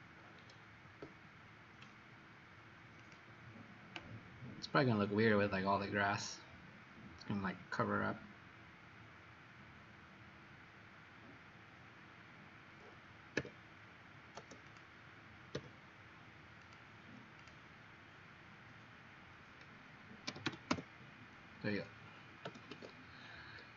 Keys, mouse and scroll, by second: 0.4 middle click, 3.0 click, 13.4 q, 14.6 click, 15.7 q, 16.7 click, 20.2-20.6 typing, 20.7 Return, 22.8 Escape, 23.5 middle click.